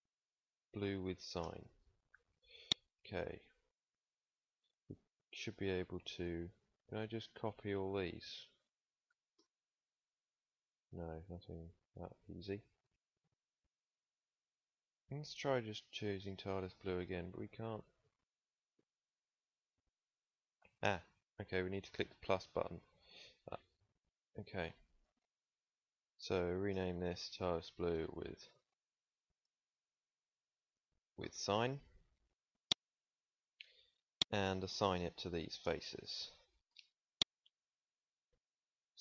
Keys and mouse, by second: 1.3 BackSpace, 3.1-12.4 drag, 12.4 ctrl+c, 14.1-31.1 drag, 32.8 ctrl+s, 37.9 ctrl+s, 38.5 middle click, 38.9 middle click.